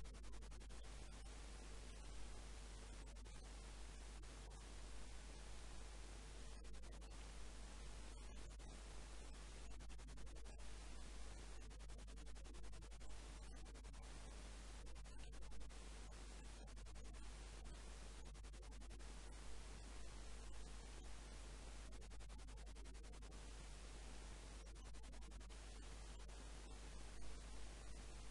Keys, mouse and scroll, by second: 0.2-1.7 middle drag, 0.9 a, 1.0 a, 1.7-3.6 drag, 5.3-9.6 typing, 11.1 e, 13.9 e, 16.7 z, 16.9-18.3 middle drag, 19.1-24.5 drag, 22.5-26.6 typing, 28.0 s.